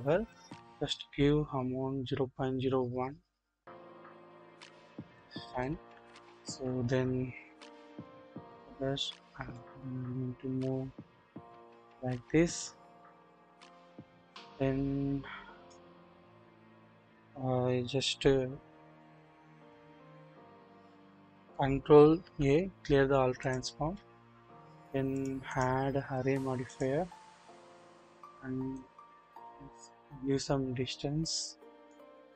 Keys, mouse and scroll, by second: 1.0-4.3 drag, 5.1 drag, 5.6 click, 6.6-7.8 scroll down 1, 7.8 KP_7, 8.5 click, 9.5-12.6 drag, 13.3-15.7 drag, 19.2 click, 22.2 ctrl+a, 25.1 double click, 28.7-31.9 drag.